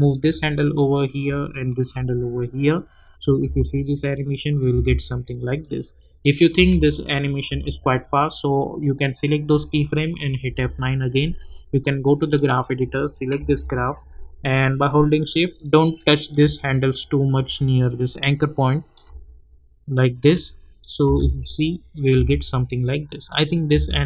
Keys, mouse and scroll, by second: 4.9 space, 5.6 click, 7.3 space, 8.6-10.4 drag, 10.4 F9, 11.5 click, 13.3 =, 14.5-18.9 drag, 18.9-20.8 drag, 21.9 space, 22.8 click, 23.7 space.